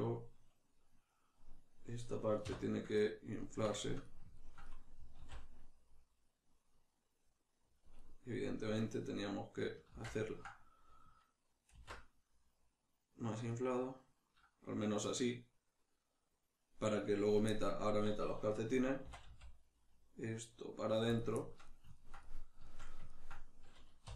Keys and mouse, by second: 2.5 \, 2.9 middle click, 5.2 alt+s, 7.8 click, 8.0 middle click, 9.9 ctrl+z, 10.3 ctrl+middle click, 11.7 alt+s, 17.0 shift+click, 17.5 ctrl+middle click, 19.0 e, 21.2 click, 21.4-24.1 shift+middle drag, 24.0 3.